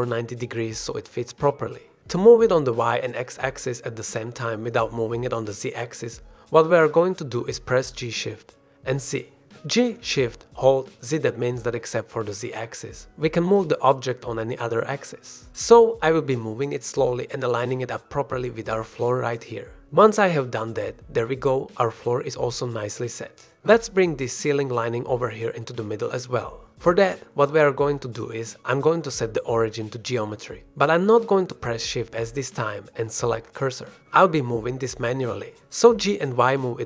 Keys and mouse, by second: 0.1 KP_0, 1.5 Return, 2.7 click, 3.2 shift+click, 7.9 click, 8.8 g, 12.5 shift+z, 20.0-20.9 drag, 21.4-21.7 drag, 22.0 ctrl+s, 22.2-22.8 drag, 22.9 click, 23.8 shift+drag, 25.7 shift+drag, 26.0-26.4 drag, 26.6 shift+drag, 26.9-27.2 middle drag, 27.2-27.6 shift+drag, 27.7 middle drag, 29.4-30.4 middle drag, 31.3 middle drag, 31.7 shift+middle drag, 32.7-33.1 shift+drag, 33.3 drag, 33.6-33.9 shift+drag, 35.0 shift+s, 35.5 g, 35.8 y, 36.8 click.